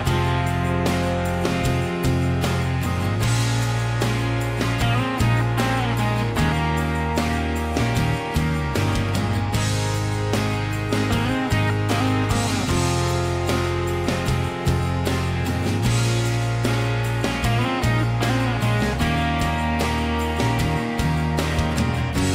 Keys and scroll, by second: 3.6 m, 5.5 f, 8.6 p, 10.3-11.6 typing, 12.8-14.5 typing, 17.0 Escape.